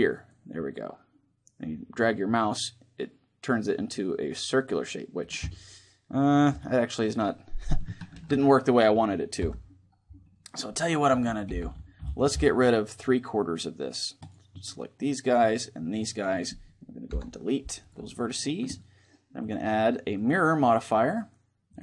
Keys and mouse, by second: 5.2-7.1 middle drag, 7.8 ctrl+z, 9.1 KP_7, 11.2 a, 11.2 c, 16.0-17.6 right drag, 16.8 Delete, 19.2-21.5 drag.